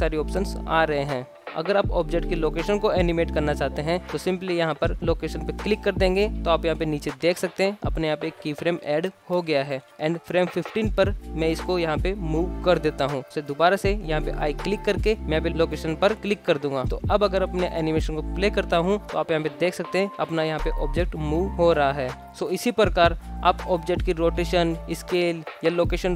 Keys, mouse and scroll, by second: 7.0-7.3 scroll up 2, 10.2 ctrl+z, 10.2 shift+middle click, 10.6-11.6 drag, 12.2 g, 13.6 i, 16.6 click, 17.4 space, 19.4 space, 19.9 click, 20.3 space, 22.3 i, 23.2 click, 23.4-26.1 typing, 24.4 click, 24.8 shift+Left, 25.2 click, 25.9 shift+Left.